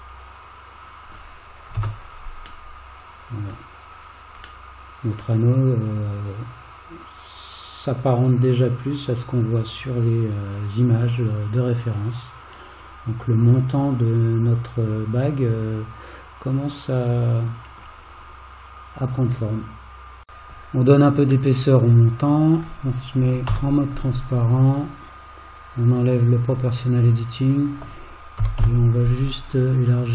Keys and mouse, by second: 0.1-1.1 middle drag, 1.8 alt+z, 2.7 middle click, 4.7-17.8 middle drag, 21.5-22.6 middle drag, 23.5 alt+z, 26.2 click, 27.4 click, 28.5 g.